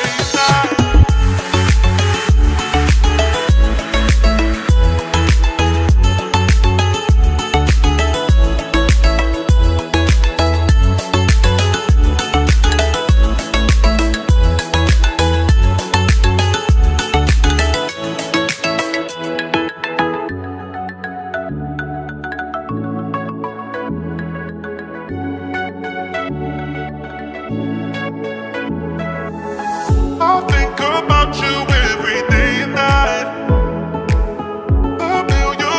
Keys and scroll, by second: 18.0 F3, 29.0 c.